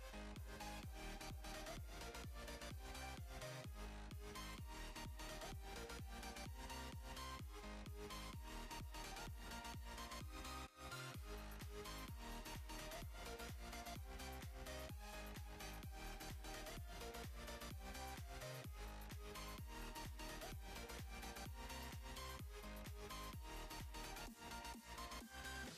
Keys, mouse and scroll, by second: 1.2-8.1 drag, 10.2 z, 10.5 click, 14.7 v, 14.8 click, 17.8 ctrl+z, 18.4-25.7 drag, 23.4 z.